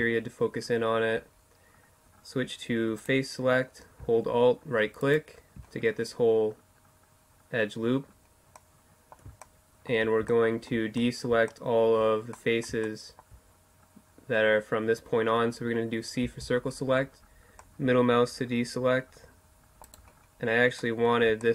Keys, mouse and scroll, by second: 0.4-2.0 middle drag, 2.0-3.8 drag, 4.0-5.9 right drag, 7.1 middle click, 11.4-15.3 middle drag, 15.3 c, 19.0-20.2 right drag, 20.2-21.5 middle drag.